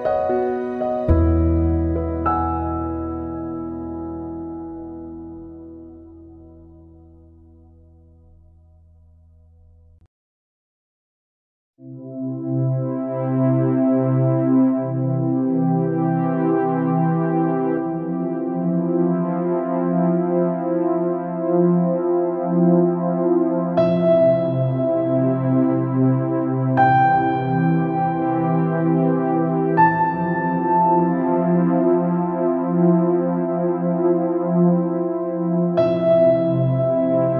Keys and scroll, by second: 14.3 ctrl+c, 14.5 ctrl+v, 33.7 ctrl+=, 34.9 Right.